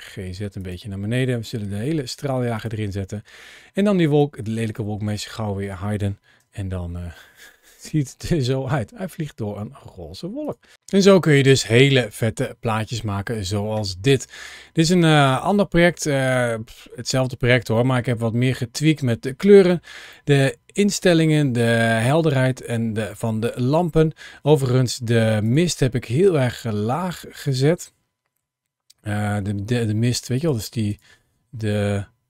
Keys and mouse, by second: 1.3 g, 3.9 drag, 6.2 KP_0, 10.2 click.